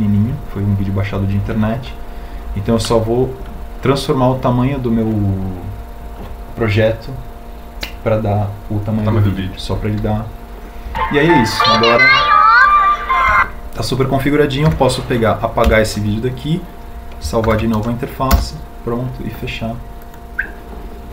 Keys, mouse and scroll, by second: 16.4 Delete, 18.2 ctrl+u.